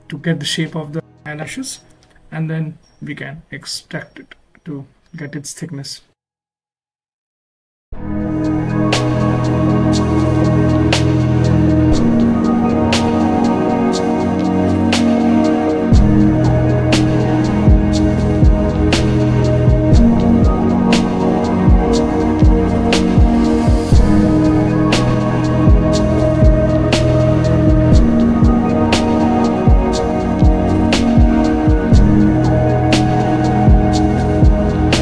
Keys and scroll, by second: 1.7 ctrl+z, 2.8 z, 4.7 z, 6.3 z, 12.8 ctrl+alt+z, 16.0 alt+z, 16.7 s, 17.3 z, 30.2 s, 32.0 ctrl+alt+s, 32.7 ctrl+alt+z.